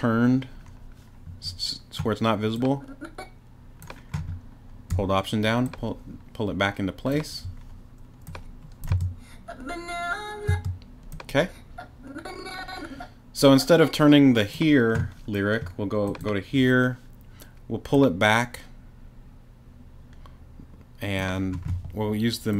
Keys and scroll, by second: 8.9 space, 10.5 space.